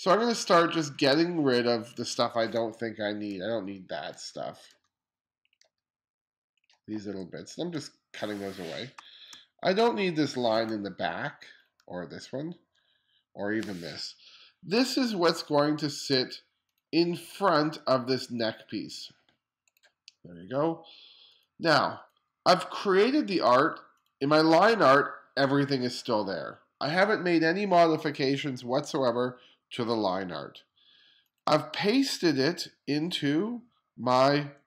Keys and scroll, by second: 2.6-5.7 typing, 6.8 BackSpace, 7.8 BackSpace, 9.0 space, 10.7 BackSpace, 11.9 BackSpace, 12.8 BackSpace.